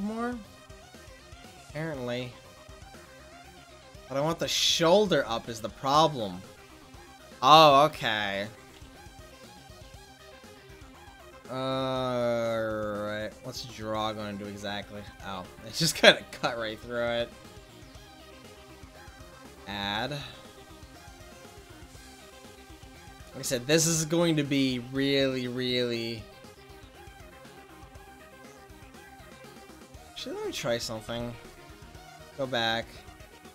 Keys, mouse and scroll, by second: 2.0-3.7 drag, 4.9 ctrl+z, 5.5 ctrl+z, 13.9 click, 15.5 ctrl+z, 22.1 click, 26.0-27.9 drag, 30.2 ctrl+z, 30.7 ctrl+z.